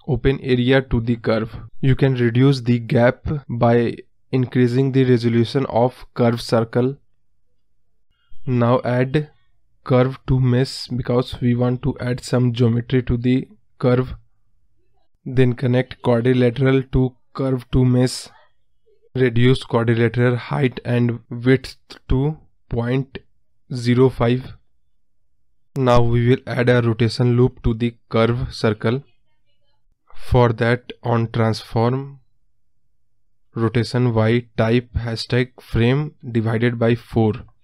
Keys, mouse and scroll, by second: 2.9-4.6 drag, 4.6 scroll up 2, 4.8-5.3 scroll down 1, 5.3 middle click, 5.4-5.8 scroll down 2, 18.5 shift+a, 20.2 click, 20.5 scroll up 1, 20.6-24.1 middle drag, 24.7-25.1 scroll up 4, 25.1 middle click, 25.1 scroll down 1, 25.2 scroll up 1, 25.5-26.7 middle drag, 26.7-28.7 scroll down 2, 28.7-29.5 scroll down 1, 29.5 middle drag, 29.8 scroll down 1, 29.9 scroll up 1, 30.2-32.5 scroll down 2, 32.5 scroll down 1, 33.2-34.6 drag, 34.6 ctrl+z.